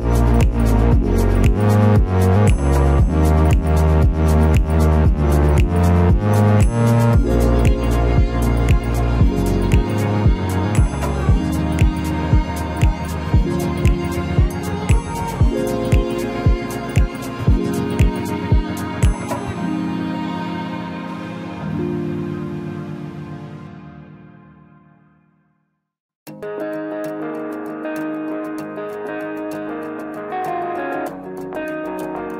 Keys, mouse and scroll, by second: 0.3 space, 2.0 ctrl+f, 4.3 shift+middle click, 12.2 shift+middle click, 14.4 ctrl+z, 17.9 shift+middle click, 20.7 shift+click, 21.5 shift+click, 22.4 shift+click, 27.7 ctrl+a, 29.2 ctrl+f.